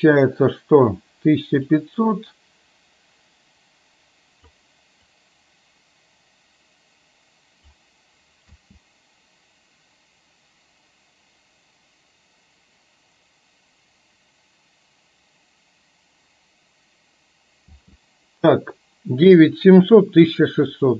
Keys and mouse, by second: 1.9-4.8 drag, 5.4-7.6 drag, 8.7 space, 17.8 space.